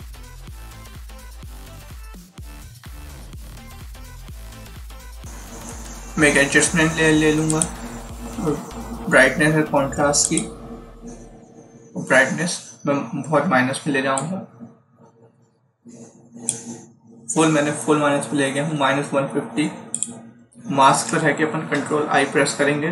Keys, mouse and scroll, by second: 1.1 0, 1.9 click, 7.4 click, 10.1 click, 14.1 click, 19.8 click.